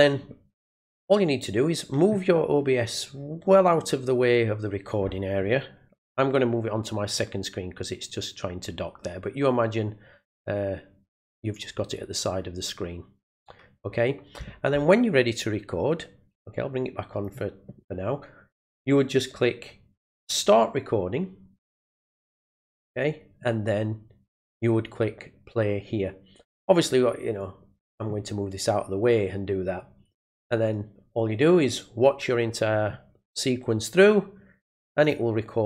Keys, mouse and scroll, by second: 1.5-17.2 drag, 27.4-35.0 drag.